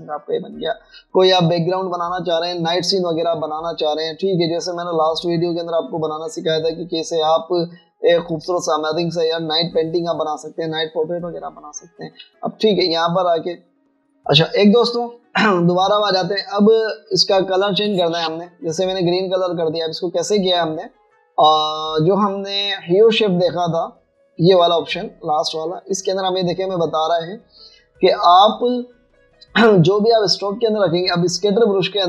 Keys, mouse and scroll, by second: 0.0-0.2 typing, 5.0 typing, 8.1 typing, 9.5 typing, 13.3 typing, 17.1 shift+click, 23.1 double click, 27.0 double click.